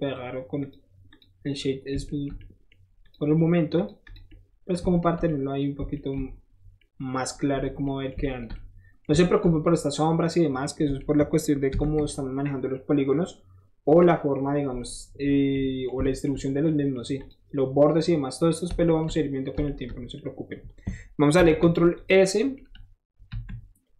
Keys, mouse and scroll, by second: 0.0 right click, 0.1 middle click, 0.6 click, 1.1 click, 1.4-1.7 middle drag, 2.1 shift+middle drag, 2.4-2.7 shift+middle drag, 3.0 shift+click, 3.3 shift+right click, 3.7 shift+click, 4.0 shift+click, 4.3-4.9 shift+middle drag, 5.0 shift+middle drag, 5.3-5.6 shift+middle drag, 6.0-7.2 shift+middle drag, 7.2-7.7 scroll down 3, 7.3 shift+middle click, 7.5 shift+middle click, 7.7-8.2 shift+middle drag, 9.0 shift+middle drag, 9.4 shift+middle drag, 9.7-10.3 shift+middle drag, 10.7-11.0 shift+middle drag, 11.7 ctrl+s, 15.0 middle drag, 15.5-15.9 middle drag, 16.0-17.0 shift+middle drag, 17.2 shift+click, 18.5-19.5 shift+middle drag, 19.5 shift+middle drag, 19.8-21.9 shift+middle drag, 21.4 ctrl+s, 21.9 click, 22.3 middle drag, 23.3 KP_1.